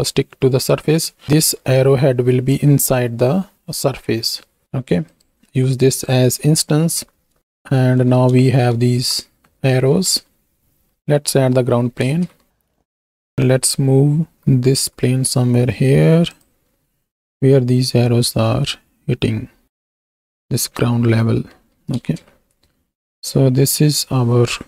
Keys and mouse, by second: 5.0 click, 5.6 click, 7.9 shift+middle click, 8.4 shift+middle drag, 9.0 alt+a, 9.8 z, 11.0 middle click, 12.1 ctrl+space, 12.7 shift+a, 13.3 KP_1, 14.3 g, 14.8 x, 17.1 s, 20.4-21.5 drag, 22.5 ctrl+space, 24.0 F2.